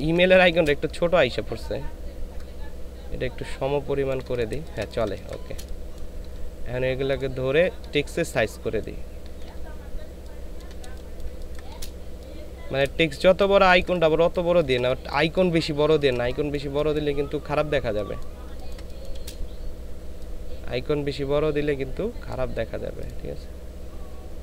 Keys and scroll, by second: 0.9 ctrl+shift+space, 4.6 space, 10.8 shift+space, 12.9 space, 14.4 ctrl+space, 15.2 ctrl+space, 15.9 ctrl+space.